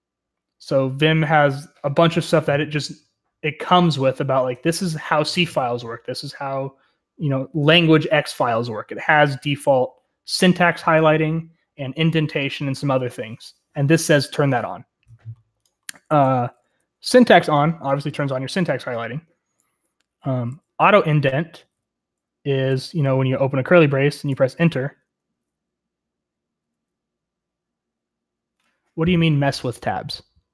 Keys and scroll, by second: 16.4 typing, 20.2 typing, 21.5 typing, 24.2 typing, 24.6 Return.